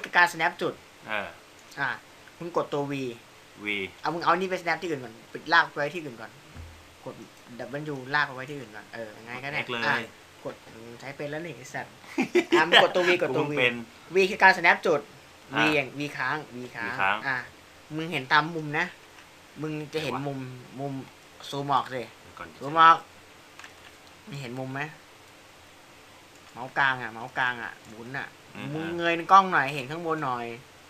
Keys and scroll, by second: 4.3 v, 6.9 x, 15.6 v.